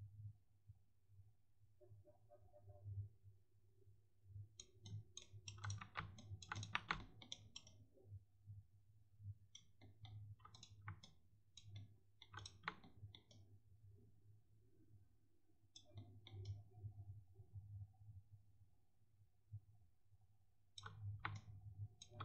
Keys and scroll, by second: 5.7 1, 6.7 1.